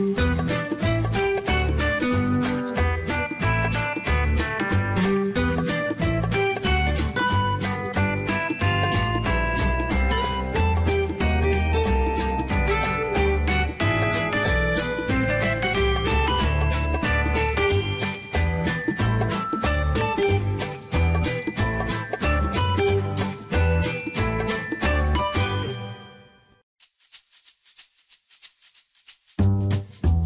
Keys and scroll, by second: 24.1 ctrl+z.